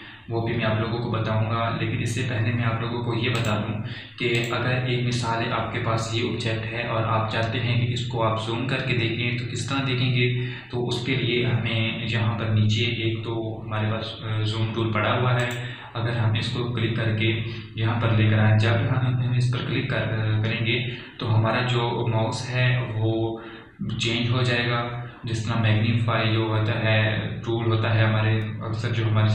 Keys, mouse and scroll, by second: 4.2 click, 4.3 click, 16.3 click.